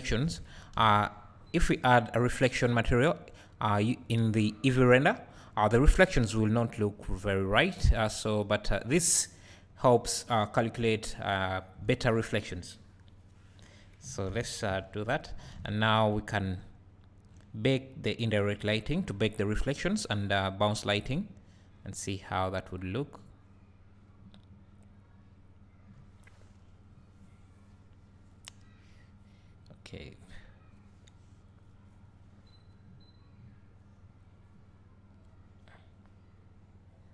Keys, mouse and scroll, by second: 0.3 KP_0, 1.2 scroll up 2, 8.3 scroll down 2, 21.9-37.1 drag.